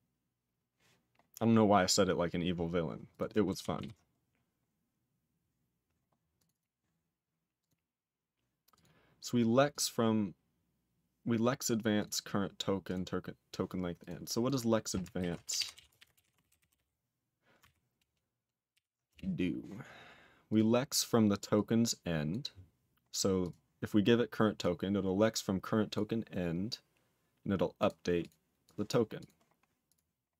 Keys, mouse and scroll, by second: 0.0-0.6 scroll up 5, 1.5 scroll up 3, 2.3-2.6 scroll up 5, 3.1 click, 3.7 ctrl+s, 4.1-4.7 scroll up 3, 6.4 click, 6.5 double click, 7.5 click, 8.7 click, 9.7 click, 11.9 click, 12.8 click, 13.9 click, 14.4 click, 15.1 ctrl+r, 15.2-17.2 typing, 17.6 ctrl+r, 18.7 ctrl+r, 19.0 Return, 20.4 click, 21.5 click, 22.2 click, 23.4 click, 24.5 click, 25.9 click, 27.7 click, 28.1 click, 28.6 click, 28.8 click, 29.1 click, 29.8 click.